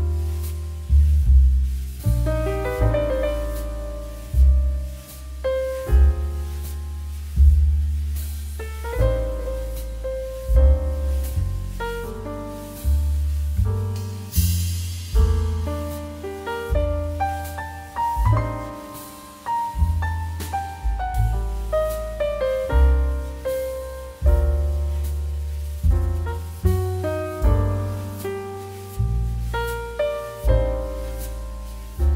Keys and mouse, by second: 3.7 click, 5.4 r, 6.5 click, 6.8 right click, 7.0 click, 7.4 r, 8.1 click, 10.2 r, 11.0 click, 11.3 right click, 11.5 click, 12.6 click, 14.2 r, 15.2 click, 15.5 right click, 15.7 click, 22.1 click, 23.2 click, 23.4 middle click, 23.8 shift+middle click, 24.4 click, 25.4 click, 30.5 shift+middle click, 31.0 shift+middle click, 31.7 middle click.